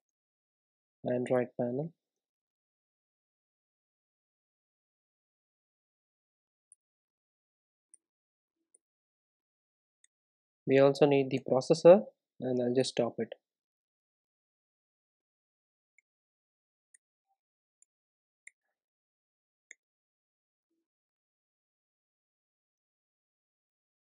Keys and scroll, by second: 0.0 super+e, 4.5 alt+Return, 9.8 super+e, 11.4 super+e, 15.2 alt+Return, 18.4 super+e, 20.6 alt+Return.